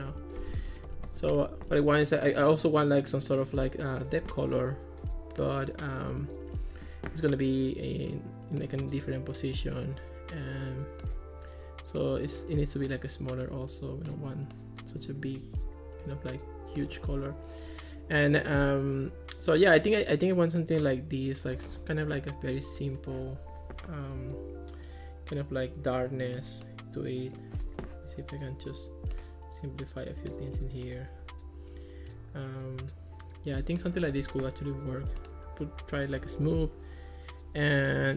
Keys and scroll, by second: 0.0-1.7 typing.